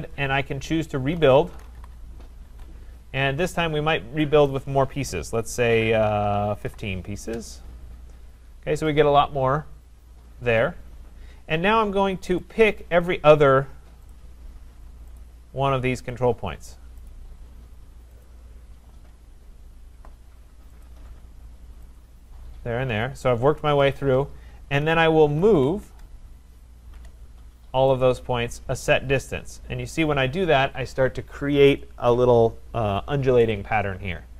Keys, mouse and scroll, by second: 0.9-2.4 typing, 4.5 click, 6.4-7.4 typing, 8.5 Return, 10.7-12.3 scroll, 12.5 click, 14.1 shift+click, 15.2 click, 16.1 click, 17.2 click, 18.3 shift+click, 20.9 shift+click, 22.0 shift+click, 24.9-26.4 typing, 27.8-28.5 typing, 28.0 click.